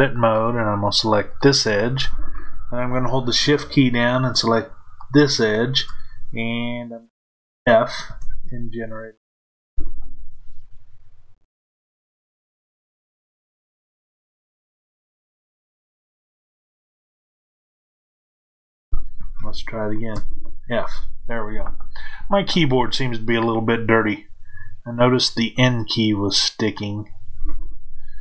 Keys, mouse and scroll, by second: 1.2 click, 4.8 shift+click, 8.0 f, 26.3 click.